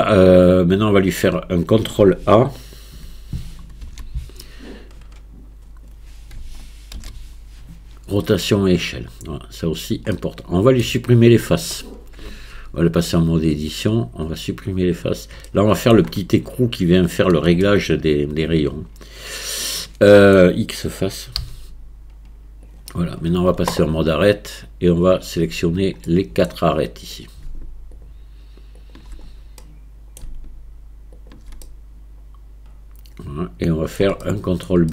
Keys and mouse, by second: 3.9 shift+a, 7.0 ctrl+a, 10.1-10.9 middle drag, 12.3 Tab, 14.1-15.1 drag, 15.5 middle click, 17.7 middle click, 18.7-20.3 middle drag, 21.4 x, 24.9-26.1 drag, 26.1 middle click, 27.1 click, 29.6 middle click, 31.7-34.0 middle drag, 34.3 shift+middle click.